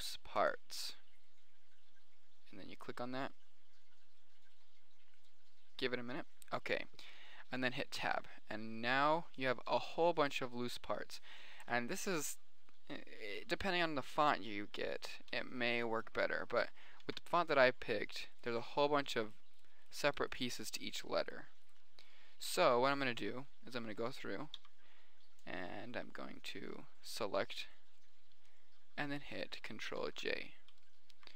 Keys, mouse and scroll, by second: 8.4 Tab, 9.3-9.6 drag, 9.8-10.6 right drag, 10.1 g, 15.8 g, 17.3 a, 20.8-21.3 right drag, 22.5-23.0 drag, 22.5-23.0 right drag, 23.0 a, 24.3-25.0 middle drag, 25.0 b, 27.9 click, 28.5 click, 29.1 click, 30.4 ctrl+j.